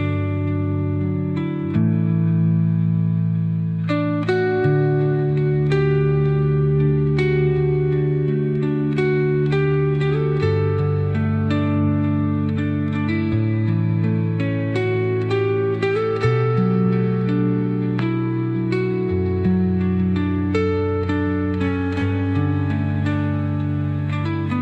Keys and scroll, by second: 8.2 Right, 9.6 Right.